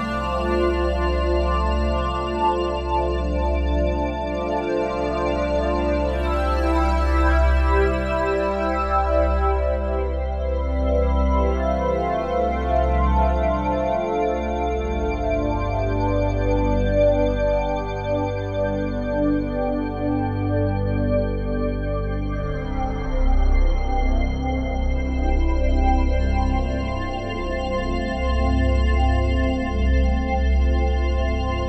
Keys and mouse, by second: 1.0-2.6 typing, 1.6 Return, 2.1-3.8 drag, 3.8-4.8 typing, 4.8 click, 5.3 click, 6.2 typing, 6.8 Return, 7.2 click, 7.8 click, 8.6 Escape, 9.0 click, 10.2-11.9 drag, 10.5 space, 11.9-12.9 typing, 15.5 space, 16.5 click, 18.5 click, 20.3 click, 21.6-24.5 drag, 24.5 space, 25.4 space, 26.2 space, 31.2-31.6 drag.